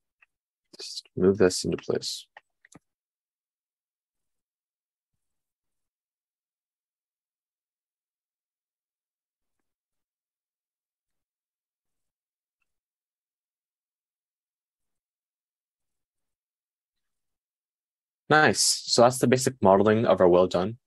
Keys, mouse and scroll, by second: 1.1 g, 3.2 g, 6.2 g, 9.2 g, 10.4 g, 13.6 g.